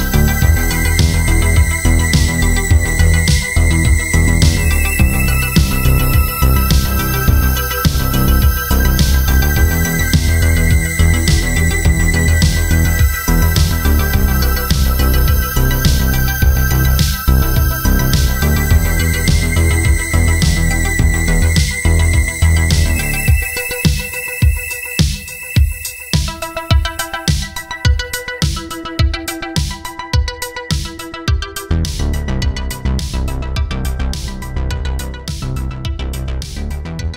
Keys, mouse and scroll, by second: 1.3 click, 2.3 click, 2.5 Escape, 3.1 click, 4.0 right click, 4.3 click, 5.0 alt+shift+click, 5.8 click, 7.1 alt+shift+click, 8.1 click, 10.7 alt+shift+click, 11.3 click, 16.5 click, 19.8 click, 23.7 click, 26.7-27.1 alt+scroll up 2, 27.4 click, 28.0 click, 28.8 click, 29.2 alt+click, 29.3 scroll down 1, 29.6 alt+scroll up 2, 30.1 scroll down 1, 30.7 click, 30.9 scroll down 2, 32.4 right click, 32.6 click, 33.8 click.